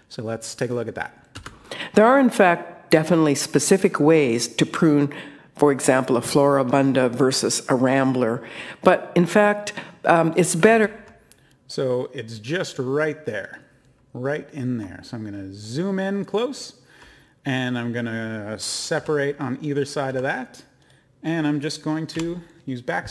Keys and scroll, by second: 18.9 e, 20.1 e, 22.1 BackSpace.